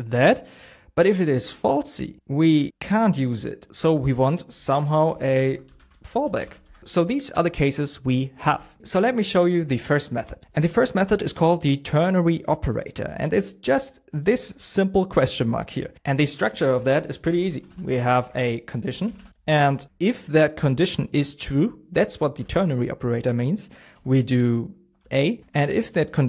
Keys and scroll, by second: 5.0 BackSpace, 6.6 shift+', 8.8 super+s, 18.1 BackSpace, 22.3 shift+?.